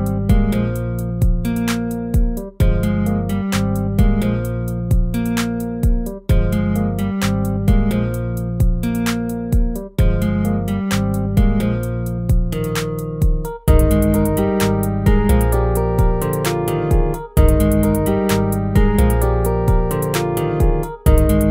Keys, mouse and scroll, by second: 0.4 ctrl+-, 7.7 ctrl+-, 19.5 ctrl+z.